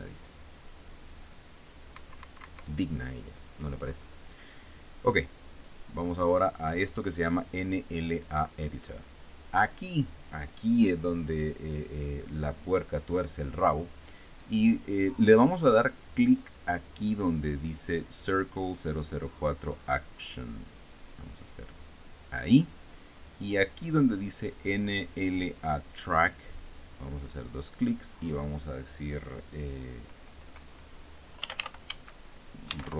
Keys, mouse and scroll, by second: 2.6 Escape, 5.6 click, 8.8 click, 21.4 click, 27.8 click, 31.8-32.9 typing.